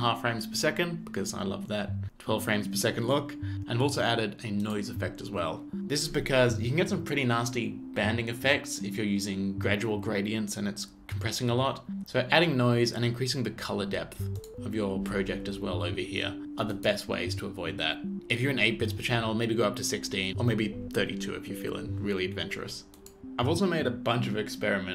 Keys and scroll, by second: 23.1 space.